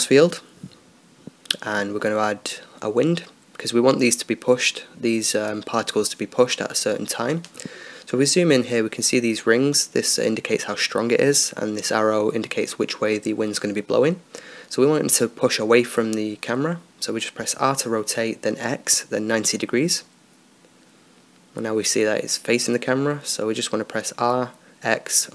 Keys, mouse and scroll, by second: 5.5-7.1 drag, 7.1 middle click, 7.6 click, 8.3-14.5 middle drag, 14.6-17.2 drag, 19.5 r, 23.8-25.3 right drag.